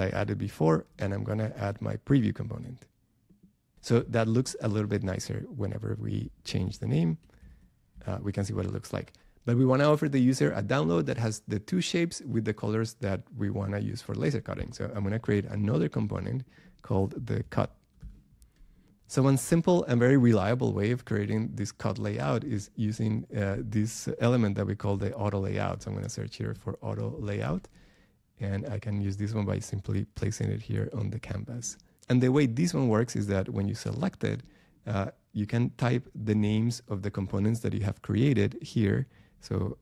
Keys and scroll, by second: 0.1 BackSpace.